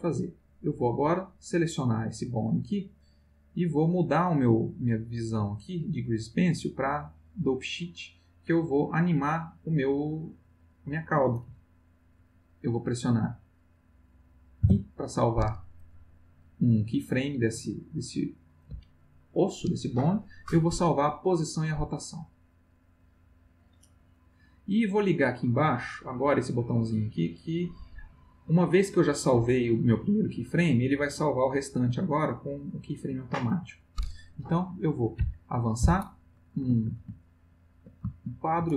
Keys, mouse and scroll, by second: 1.0 click, 5.7 click, 6.9 click, 14.6 i, 22.4 click, 31.2 click, 35.1 Right, 37.2 ctrl+middle click, 38.2-38.7 ctrl+shift+middle drag.